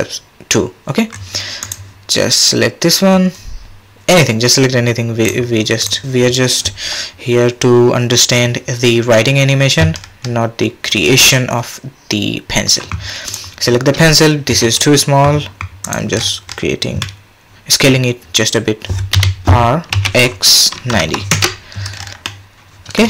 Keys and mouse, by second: 5.2 click, 10.0 middle click, 10.6 middle click, 14.5 s, 16.1-17.0 middle drag, 17.0-17.8 drag, 19.1 r, 22.2-23.0 drag.